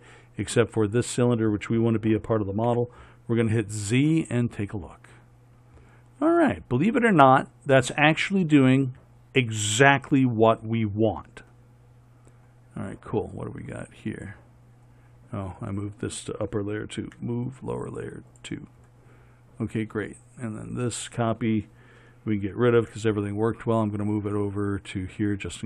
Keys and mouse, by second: 3.0 z, 6.0 middle click, 14.4 right click, 15.3-18.6 drag, 15.9-18.6 right drag, 20.9-25.1 drag.